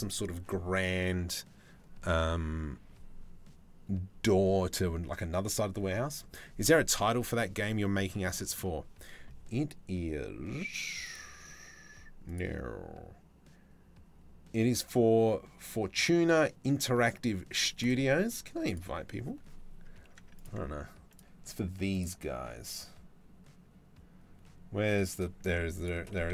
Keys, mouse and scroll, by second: 7.7 middle click.